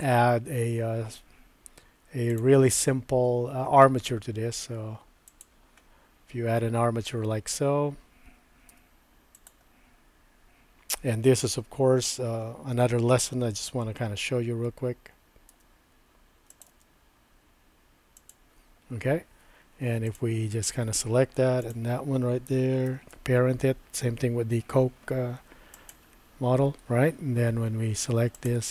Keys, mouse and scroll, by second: 2.4-5.5 drag, 8.7 Tab, 9.4 click, 15.5 e, 16.7 e, 18.9 Tab, 20.1 click, 21.6 shift+click, 22.8 ctrl+p, 28.3 click.